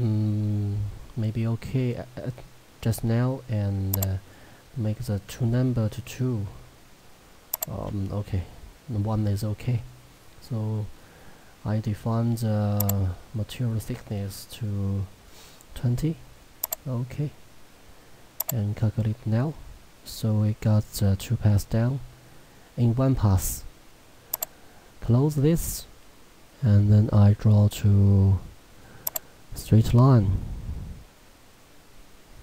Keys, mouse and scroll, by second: 4.0 click, 5.3 2, 7.4-7.9 typing, 7.6 click, 11.0-12.8 scroll, 12.8 click, 16.6 click, 24.4 click, 29.1 click.